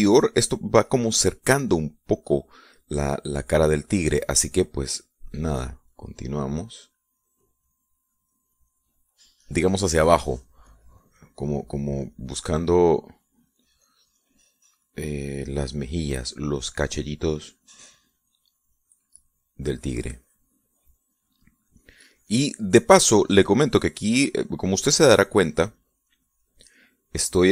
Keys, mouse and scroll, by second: 5.6-25.7 drag, 25.8-27.5 drag.